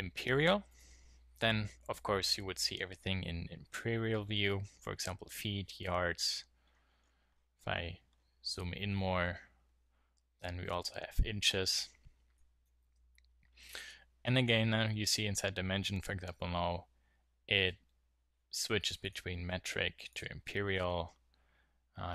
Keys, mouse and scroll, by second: 0.6-2.2 drag, 2.3 click, 2.4-3.6 middle drag, 2.5 click, 2.5 right click, 4.2-7.0 middle drag, 9.0-14.9 middle drag, 19.0-22.0 drag, 22.0 middle click, 22.0 right click.